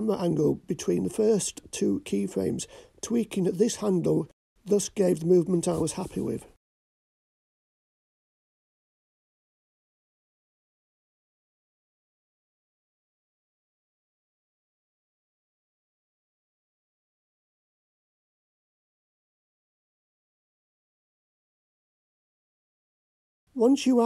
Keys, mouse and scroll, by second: 0.5-5.0 drag, 7.3 click, 8.5 g, 12.8 click, 14.1-23.2 drag.